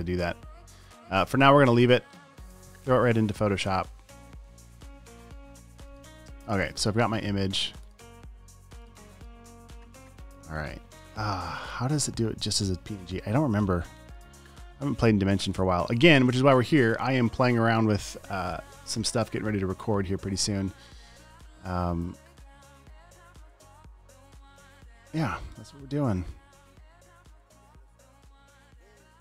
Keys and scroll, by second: 0.0 space.